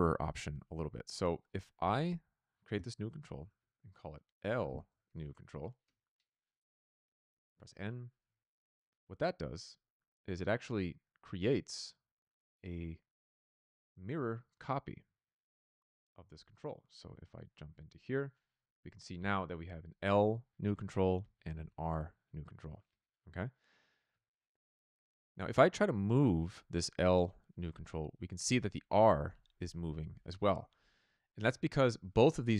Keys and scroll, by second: 3.1-5.7 typing, 5.7 Return, 7.2 n, 16.3 a.